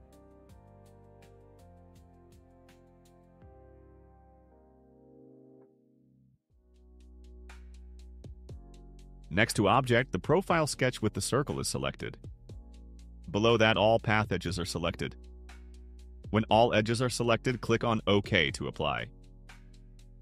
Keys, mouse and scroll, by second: 1.4 right click, 2.6 click, 3.5 click, 4.4 click, 5.3 click, 6.1 click, 19.4 click.